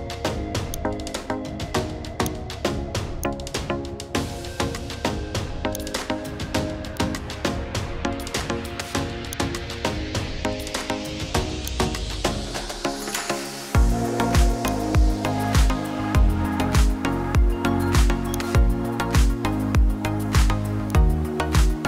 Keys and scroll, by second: 4.2 Up, 7.5 Left, 9.9 Left.